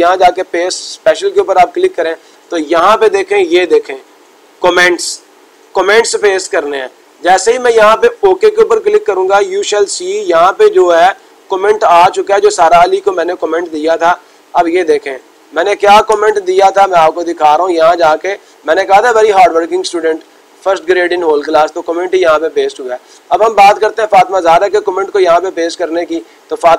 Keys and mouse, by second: 0.5-1.6 drag, 5.6-6.7 drag, 8.2 click, 12.9 click, 13.3 click, 26.1-26.7 drag.